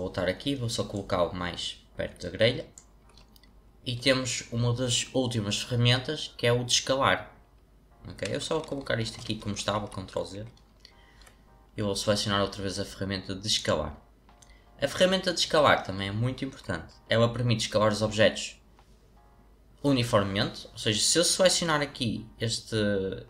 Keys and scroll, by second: 9.4 ctrl+z, 9.7 ctrl+z.